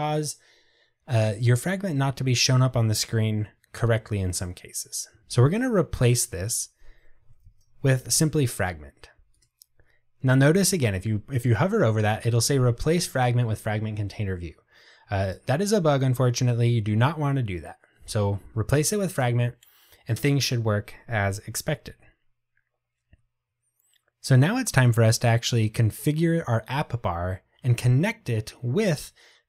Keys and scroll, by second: 7.9 Tab.